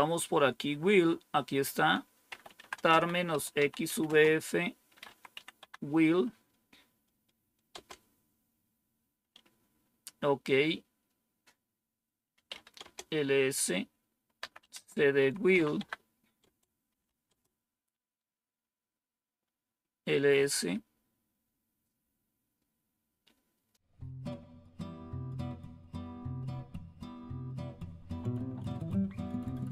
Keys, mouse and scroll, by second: 1.5 click, 2.0-5.5 typing, 7.6 typing, 12.0-12.8 typing, 14.0-17.5 typing, 23.7 click, 25.9-27.2 right drag.